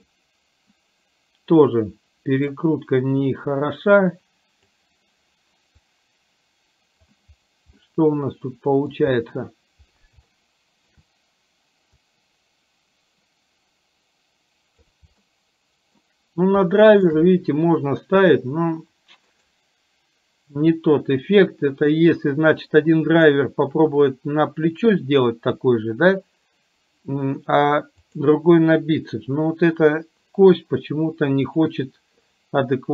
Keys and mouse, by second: 0.2-2.4 middle drag, 4.2 click, 5.9-7.2 drag, 7.9-8.9 middle drag, 10.4-11.1 shift+middle drag, 12.1-14.9 drag, 15.3 shift+middle click, 16.8-17.2 shift+middle drag, 19.4-22.3 right drag, 23.2 click, 28.2 click, 31.6 click.